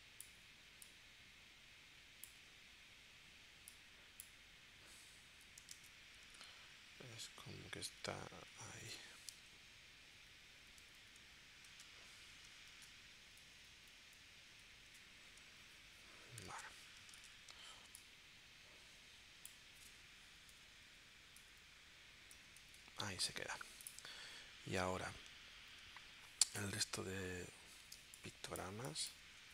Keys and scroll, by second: 2.4 w, 5.8 super+Tab, 8.4 super+Tab, 10.1 Down, 11.7 super+Tab, 12.7 super+Tab, 13.2 Down, 16.6 super+Tab, 17.2 super+Tab, 20.4 Down, 22.4 Up, 28.0 space.